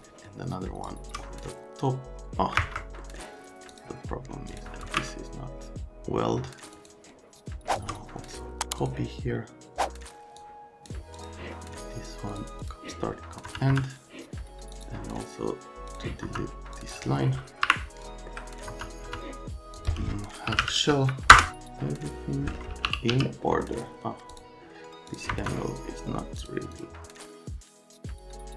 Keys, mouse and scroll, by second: 0.3 click, 2.6 Escape, 3.0 right click, 3.7 click, 4.5 click, 4.8 ctrl+a, 6.7 click, 7.6 shift+click, 8.8 click, 10.4 click, 11.2 click, 12.3 click, 12.6 click, 13.0 right click, 13.4 F3, 13.7 F3, 14.7 click, 15.9 click, 16.2 F3, 16.7 click, 17.6 Delete, 18.0 click, 18.1 alt+middle click, 18.7 F3, 19.0 F3, 19.7 click, 20.2-21.1 typing, 21.3 Return, 21.5 alt+middle click, 21.9 click, 22.6-23.6 typing, 23.4 click, 24.3 click, 25.1 click, 25.3 F3, 26.4 click, 26.7 click, 27.3 click, 27.6 middle click, 28.0 click, 28.3 ctrl+a.